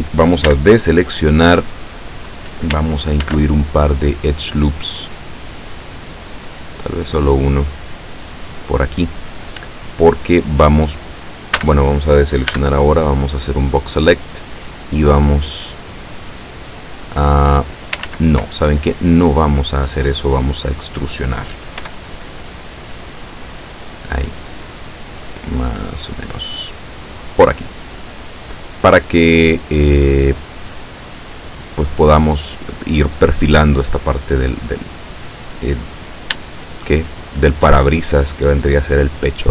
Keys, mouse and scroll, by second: 0.5 a, 3.3 ctrl+r, 5.9 click, 8.3 click, 11.6 a, 12.6 b, 13.6-14.6 drag, 15.3-17.8 drag, 18.1 ctrl+z, 21.9 e, 27.1 click, 35.4 scroll down 2, 36.5-37.8 shift+middle drag.